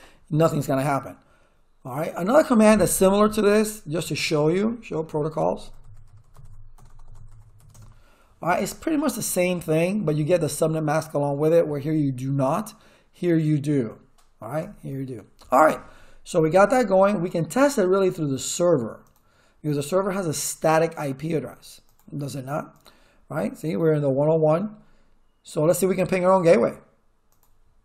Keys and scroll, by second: 3.7-8.1 typing, 9.0 Return, 14.6 Return.